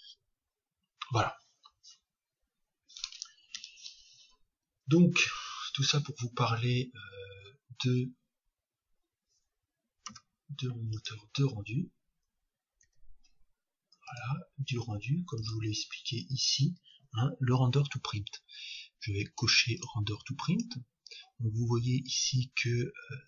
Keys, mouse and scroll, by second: 0.0 click, 14.0-16.0 drag.